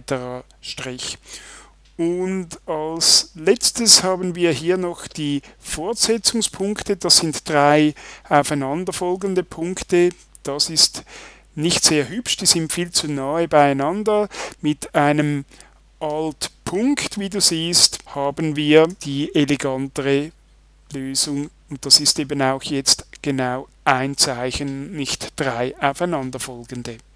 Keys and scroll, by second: 18.9 alt+..